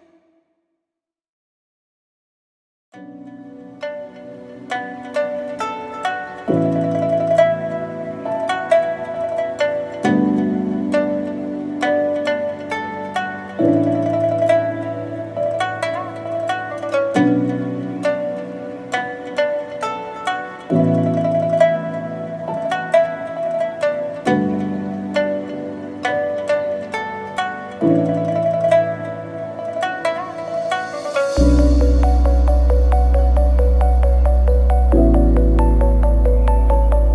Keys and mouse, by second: 12.6 middle click, 12.7 click, 12.8 middle click, 13.5 middle drag, 16.7-17.7 drag, 18.0-19.9 middle drag, 20.0-22.3 middle drag, 23.5 middle drag.